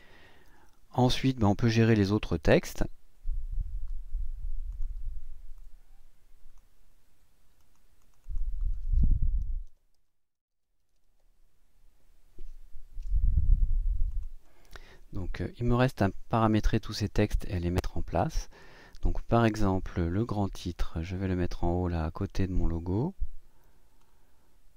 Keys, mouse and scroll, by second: 5.5 click, 7.6 click, 8.0 click, 9.5 shift+t, 10.8 r, 14.1 click, 18.1 click, 20.2-24.2 drag.